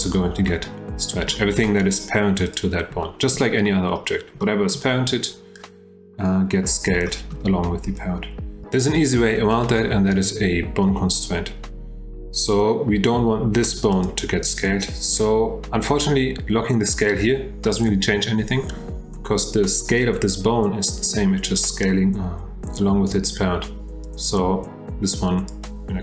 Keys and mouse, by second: 0.5 middle click, 2.4 click, 3.0-3.4 shift+drag, 3.6-3.9 drag, 4.4-4.7 shift+drag, 7.1-7.4 shift+drag, 24.0-25.5 drag, 25.6-26.0 drag.